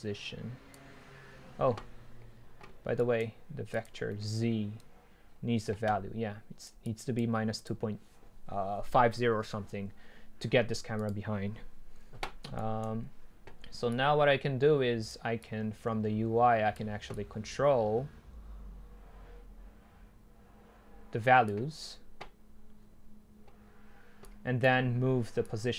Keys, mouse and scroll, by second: 11.1-12.6 drag.